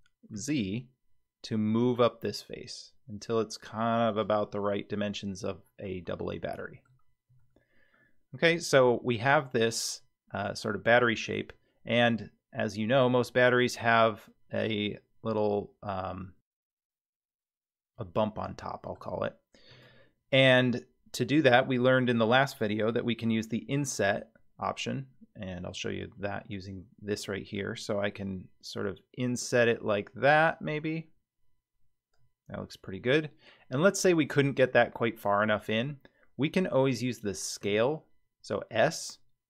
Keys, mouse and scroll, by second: 4.6-6.9 middle drag, 7.3 Tab, 7.9-9.3 middle drag, 10.6-11.2 shift+middle drag, 17.9-18.4 scroll up 2, 18.6-19.0 shift+middle drag, 19.7 Tab, 26.4 click, 27.5-32.1 drag, 37.6 s.